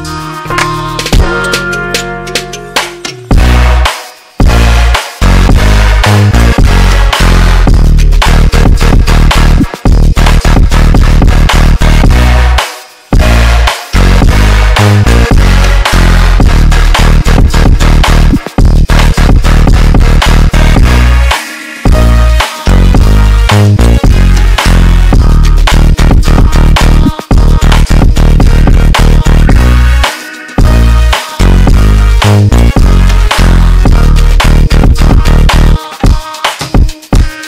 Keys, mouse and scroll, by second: 5.8 y, 7.1 click, 15.3 g, 23.0 g, 27.4 ctrl+z, 29.2 g.